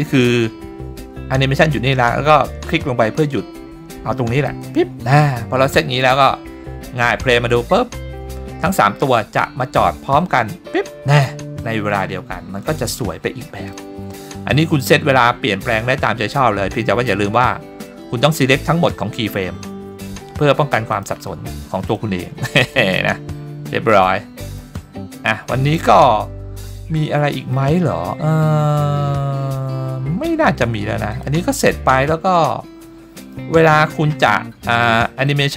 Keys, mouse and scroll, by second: 6.0 click, 7.0 click, 12.6 click, 13.4-13.7 scroll down 2, 13.7-14.2 middle drag, 20.9 click, 22.0-24.6 drag, 25.7 click, 26.6 click, 27.2-27.6 middle drag, 31.1 click, 32.4-33.4 middle drag, 35.3 shift+middle drag.